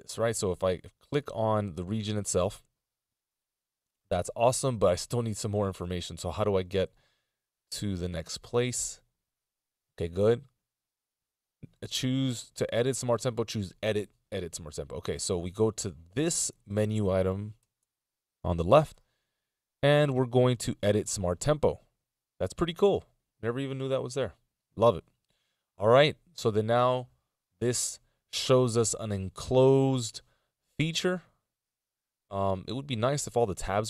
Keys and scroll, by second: 16.4 ctrl+alt+super+m.